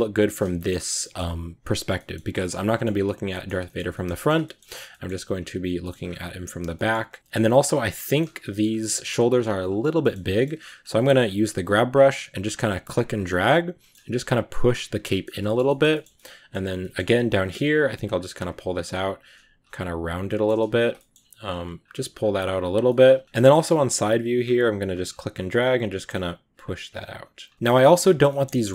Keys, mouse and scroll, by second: 0.7 scroll down 1, 0.9 middle click, 1.8-2.2 scroll up 3, 1.9 middle click, 2.2-3.7 middle drag, 3.7 scroll up 1, 4.0-5.2 shift+middle drag, 5.2-5.6 scroll down 2, 5.7 middle click, 5.8-6.5 scroll up 2, 6.5 scroll up 3, 6.6 shift+middle click, 7.5 scroll up 2, 7.5 middle click, 8.1 scroll down 1, 8.2-9.4 middle drag, 9.4 click, 9.8 scroll up 1, 9.9 middle click, 10.6-11.7 drag, 11.7 scroll down 2, 12.4 click, 13.3-14.5 middle drag, 14.5 click, 14.9 middle click, 15.1 scroll down 2, 15.3-17.3 shift+middle drag, 17.3-17.9 scroll down 3, 17.9-19.0 drag, 19.0-19.5 scroll up 1, 19.5 click, 20.1 scroll up 1, 20.1 middle click, 20.6 ctrl+z, 20.9 middle click, 21.3-22.7 drag, 22.7-24.7 middle drag, 24.7-27.6 drag, 27.6 shift+middle click, 27.9 scroll up 1, 28.1-28.7 shift+middle drag.